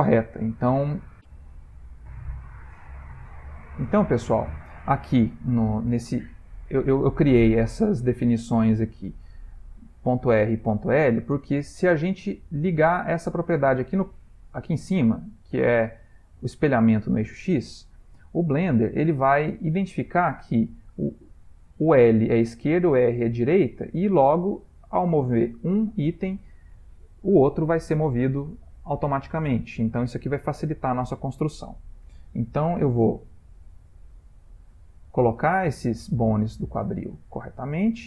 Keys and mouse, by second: 3.1 click, 4.8 middle click, 7.4 ctrl+middle click, 13.4 click, 15.6 click, 18.6 ctrl+middle click, 22.3 g, 26.9 ctrl+middle click, 27.5 middle click, 29.7 ctrl+middle click, 30.2 shift+middle click, 33.0 g, 34.5 middle click, 36.3 shift+middle click, 37.2 ctrl+middle click, 37.3 shift+middle click, 37.6 shift+middle click, 37.8 shift+middle click.